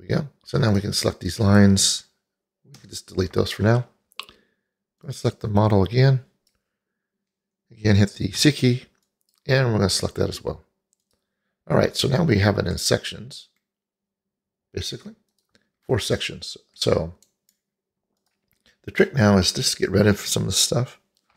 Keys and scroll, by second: 3.1 Delete, 8.9 c.